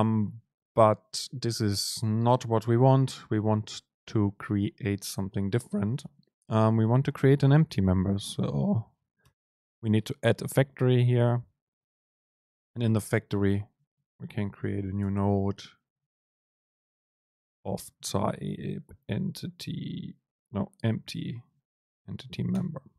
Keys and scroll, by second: 9.4 Return, 15.2 super+space, 17.8 Right, 18.2 super+space.